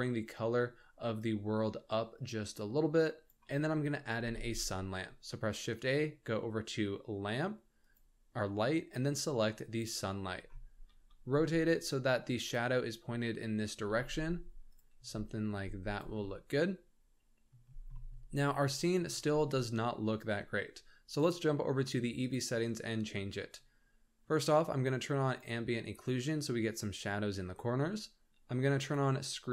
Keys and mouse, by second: 4.1 shift+a, 10.8 r, 13.9 g, 15.1 z, 15.5 g, 16.2-17.4 middle drag, 17.9 middle drag, 18.5-19.0 shift+middle drag, 22.2 click, 25.2 click, 28.8 click.